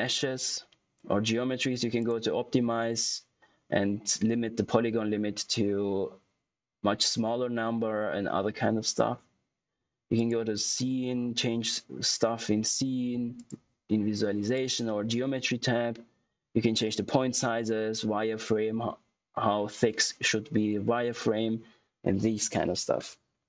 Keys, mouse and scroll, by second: 1.9 click, 10.1 click, 13.3 click.